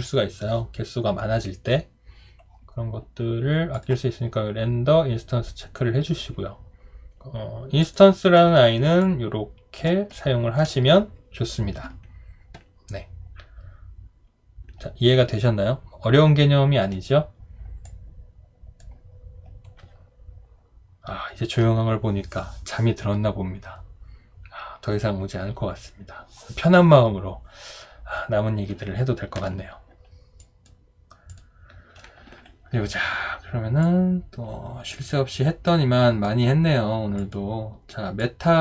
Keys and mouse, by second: 8.6 alt+right click, 9.0 alt+click, 10.2 alt+middle click.